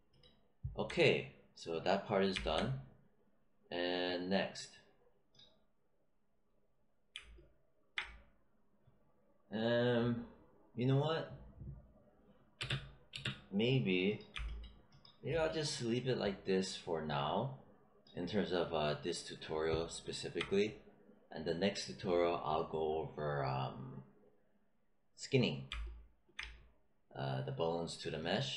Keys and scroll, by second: 12.5 space.